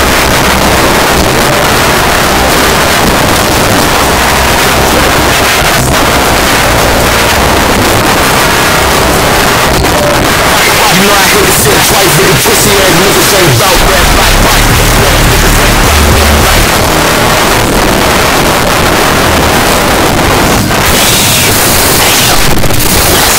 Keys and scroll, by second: 2.0 n, 2.1-3.0 Down, 3.3 Down, 3.5 Return, 16.7 Page_Down.